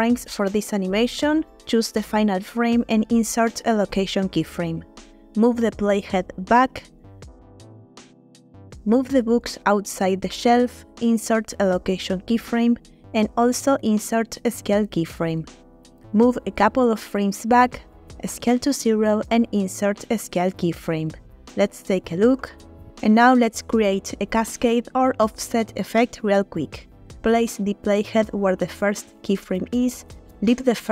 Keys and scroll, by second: 0.3-0.7 typing, 3.7 i, 8.8 g, 9.0 y, 11.5 i, 13.6 i, 19.1 s, 19.6 0, 21.0 i, 22.2 space, 24.3 space, 26.5 space.